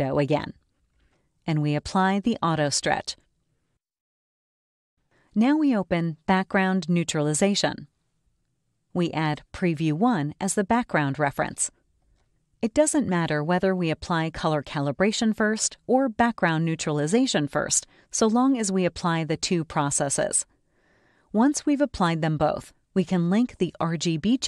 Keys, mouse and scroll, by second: 1.3 click, 4.3 click, 8.9 click, 12.8-15.5 ctrl+drag, 18.1 click, 20.7 click, 24.3 click.